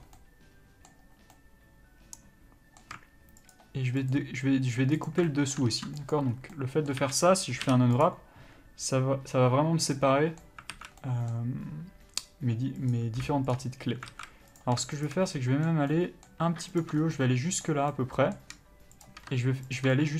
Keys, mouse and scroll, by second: 3.8 alt+shift+click, 5.5 middle click, 6.4 ctrl+e, 6.6 scroll down 1, 6.8 middle click, 7.3 a, 8.3 u, 10.2 middle click, 11.0 alt+a, 11.3 middle click, 13.1 click, 13.8 shift+click, 14.4 alt+a, 14.8 click, 15.3 shift+click, 15.6 middle click, 17.1 ctrl+click, 17.3 scroll down 1, 17.4 middle click, 18.6 middle click, 19.3 middle click, 19.3 shift+click, 20.0 ctrl+click.